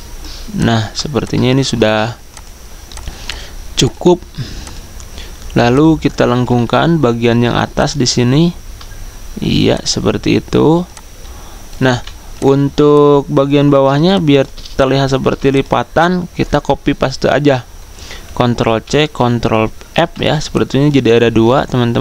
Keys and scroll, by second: 12.8-13.6 typing, 15.3 v, 18.4 ctrl+c.